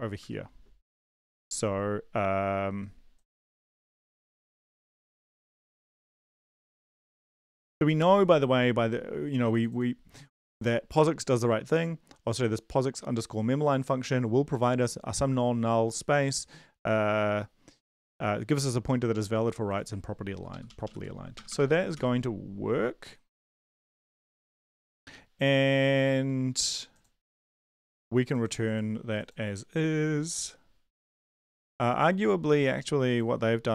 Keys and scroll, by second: 0.2 Return, 3.7 Up, 4.1 End, 5.7 shift+Up, 5.8 shift+Up, 6.0 shift+Up, 6.1 shift+Right, 20.5 shift+Up, 20.6 shift+Up, 20.8 shift+Up, 21.3 shift+Right, 21.3 BackSpace, 21.5 BackSpace, 21.9 ctrl+s.